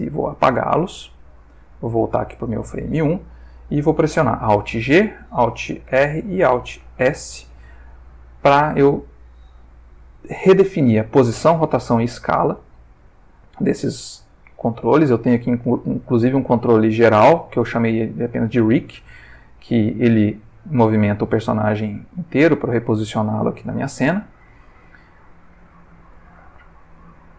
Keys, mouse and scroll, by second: 0.1 click, 0.8-2.3 drag, 4.8 alt+g, 5.9 alt+r, 6.9 alt+s, 8.3-9.0 ctrl+middle drag, 12.3 click, 15.3 g, 17.6 Escape, 18.9 g, 24.2 click, 24.9-26.3 ctrl+middle drag, 26.4-27.3 ctrl+shift+middle drag.